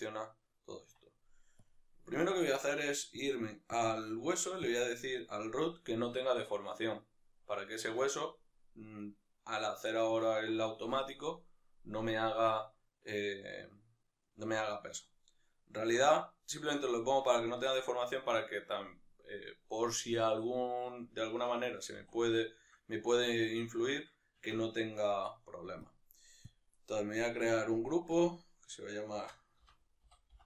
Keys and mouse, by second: 1.7 Tab, 2.1 right click, 4.7 click, 9.0-10.0 right drag, 10.0-17.6 ctrl+middle drag, 16.0 Tab, 17.6-21.5 right drag, 21.5 Tab, 21.9 a, 22.4-27.6 middle drag, 23.1 Tab, 27.6-28.2 drag.